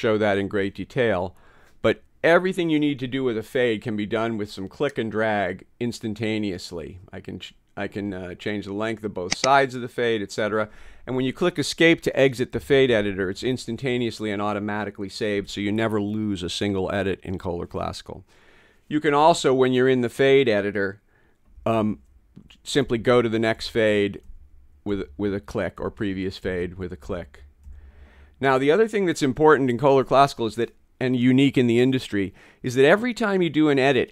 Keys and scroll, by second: 12.6 ↺, 21.6 f, 22.9 Right, 23.6 Right, 25.8 Left, 26.5 Left, 28.5 Left.